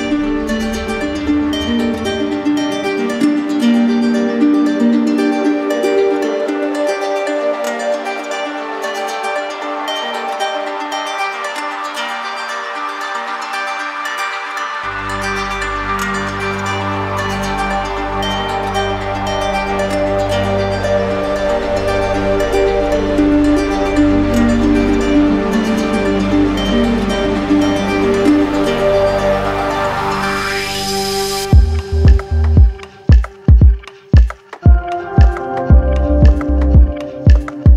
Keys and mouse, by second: 0.2 shift+click, 1.7 click, 3.7 click, 5.5 click, 7.1 shift+click, 8.0 shift+click, 10.2 shift+click, 10.8 shift+click, 11.1 shift+click, 11.7 shift+click, 12.2 shift+click, 12.7 shift+click, 13.1 shift+click, 17.1 right click, 19.0 z, 20.7 click, 21.6 right click, 22.7 click, 25.0 alt+click, 26.1 alt+click, 27.6 right click, 28.5 alt+click, 29.4 alt+click, 30.4 alt+click, 32.3 right click, 35.4 z, 36.3 click.